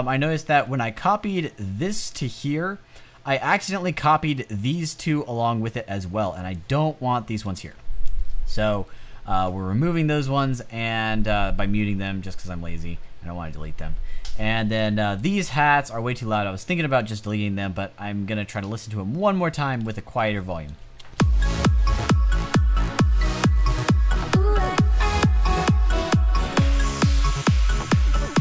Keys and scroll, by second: 20.9 space.